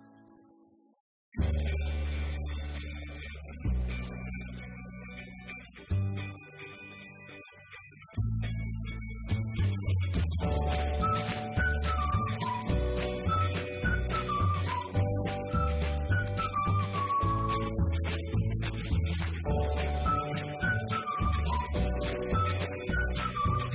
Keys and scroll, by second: 1.3-2.2 typing, 9.9-11.2 typing.